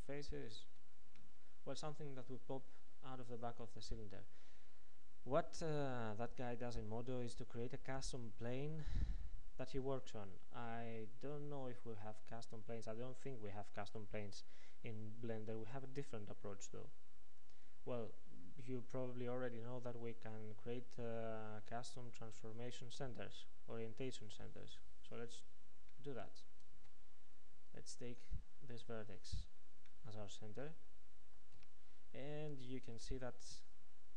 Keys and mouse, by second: 22.6-24.3 drag, 26.8 ctrl+Tab, 29.4 click, 30.3-31.6 right drag, 31.6-34.1 drag, 31.6 n.